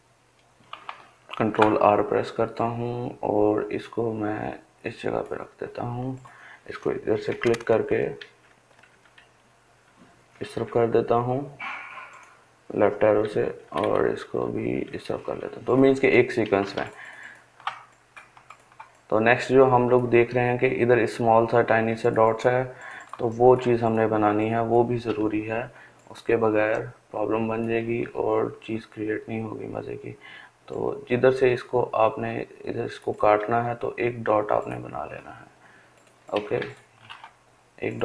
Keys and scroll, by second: 5.9-6.6 Left, 6.7 Left, 7.1 Left, 7.3 Left, 7.6 Left, 7.8 Left, 11.7 Left, 12.0 Left, 12.2 Left, 12.4 Left, 12.6 Left, 12.9 Left, 13.0 Left, 13.3 Left, 35.0 Delete.